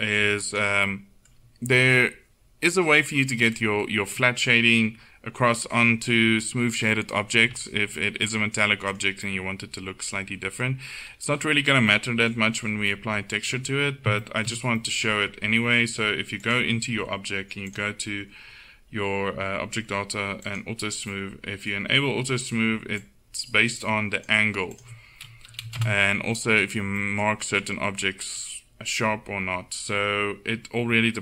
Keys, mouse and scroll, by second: 0.5 right click, 1.3-7.5 drag, 1.3-7.9 middle drag, 16.5-20.5 right drag, 17.7-21.1 drag, 22.4 middle click, 23.0-26.5 drag, 29.3 middle click, 29.7 middle click.